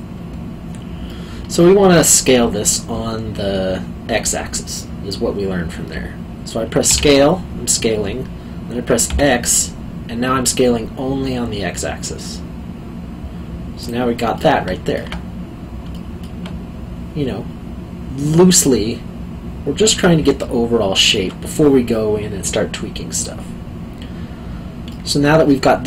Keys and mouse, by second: 1.1 middle click, 6.9 s, 9.1 x, 13.8 click, 14.3 middle click, 15.9 alt+middle click, 20.4 alt+middle click, 24.9 middle click.